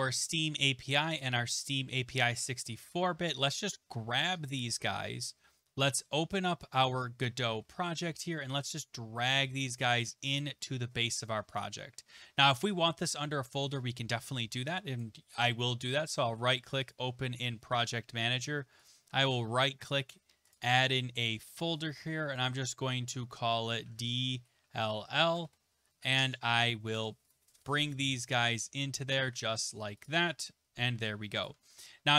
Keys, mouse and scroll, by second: 1.2 ctrl+click, 2.7 ctrl+click, 6.8 click, 7.6 alt+Tab, 10.3 click, 11.6 click, 15.0 right click, 16.9 click, 18.9 right click, 20.5 click, 21.6 click, 23.8-25.0 typing, 25.4 Return, 27.3 click, 27.7 ctrl+click, 28.3 ctrl+click, 29.1 click, 30.0 click, 31.4 ctrl+click.